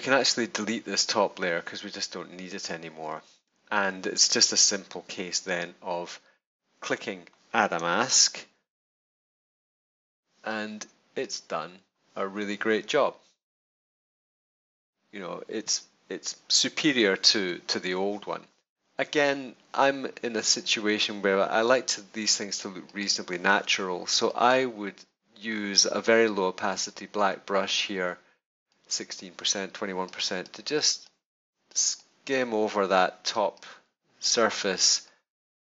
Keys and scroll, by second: 8.0 super+=, 9.8 super+space, 14.2 super+-.